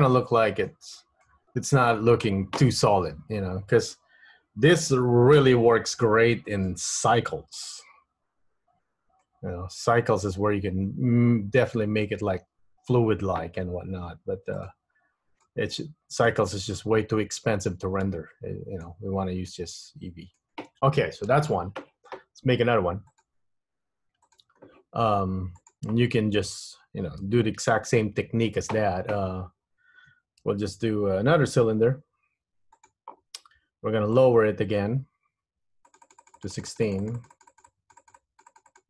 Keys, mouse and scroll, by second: 0.4 middle click, 1.1 middle click, 2.2 middle click, 6.7 click, 9.4 middle click, 14.9 click, 16.4 middle click, 19.7 middle click, 23.3 click.